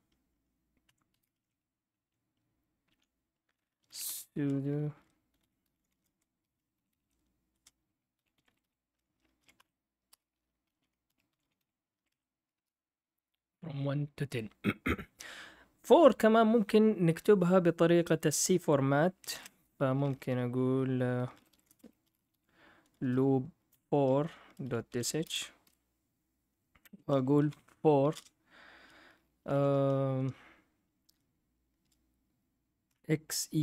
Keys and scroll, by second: 0.0-13.0 typing, 0.8 Escape, 9.5 Tab, 10.1 Return, 12.1 Tab, 19.3 ctrl+l, 21.1-25.5 typing, 25.6 F8, 27.1-28.1 typing, 29.3 (, 29.5 (, 32.6-33.6 typing.